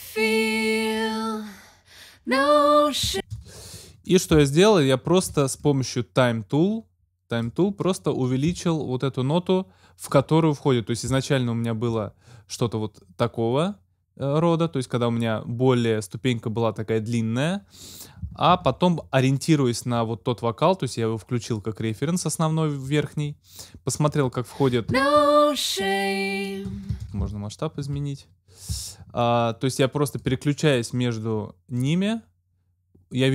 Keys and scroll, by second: 2.9 space, 18.5 super+z, 26.8 alt+super+space.